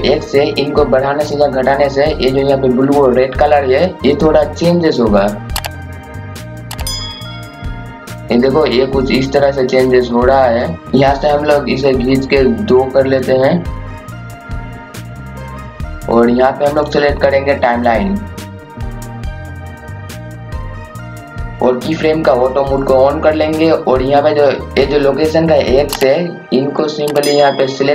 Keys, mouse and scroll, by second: 10.8 KP_0, 11.9-18.9 drag, 19.3 scroll up 1, 19.4 scroll down 1, 20.0 click, 24.7 KP_0, 26.6 click.